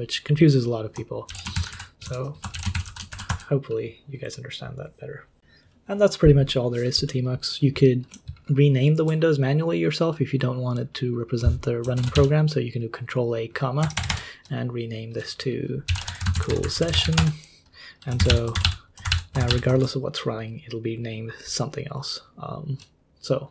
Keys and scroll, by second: 1.3 ctrl+c, 1.3-3.6 typing, 11.9 ctrl+a, 12.1 ,, 13.9 BackSpace, 14.1 BackSpace, 15.6-19.5 typing.